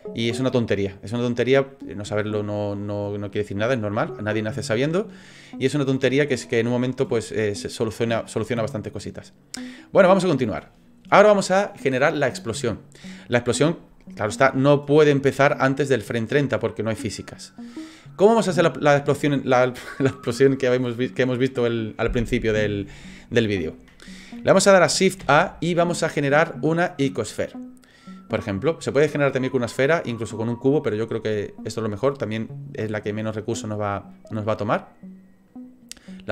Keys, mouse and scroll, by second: 14.4 click, 25.2 shift+a, 35.5 click.